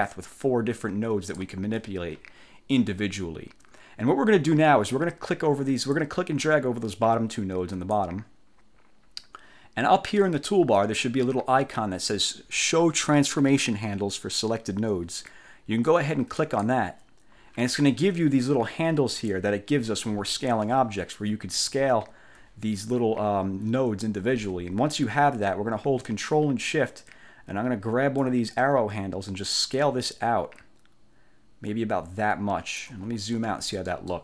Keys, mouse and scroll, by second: 1.0 click, 1.8 ctrl+z, 4.0 scroll down 2, 6.1-8.2 drag, 16.5 click, 18.5-18.8 ctrl+scroll up 2, 20.8 1, 21.8-22.5 ctrl+scroll up 4, 28.3-33.1 ctrl+shift+drag, 33.2-33.7 ctrl+shift+scroll down 3, 34.0 ctrl+click.